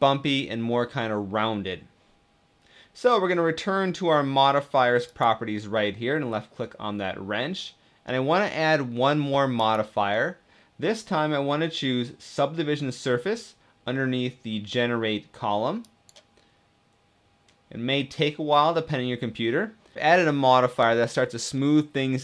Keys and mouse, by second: 4.7 click, 9.3-11.2 drag, 17.2 click, 19.8 middle click, 21.4-22.2 middle drag.